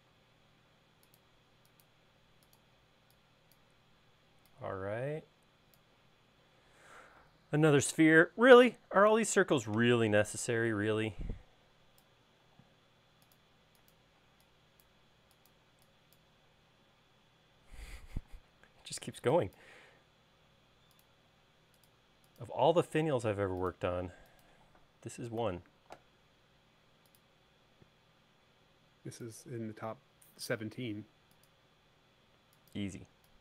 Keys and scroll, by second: 2.9 e, 9.3 c, 12.6 |, 14.4 e, 18.4 r, 21.5 l, 25.6 c, 29.9 l, 33.1 e.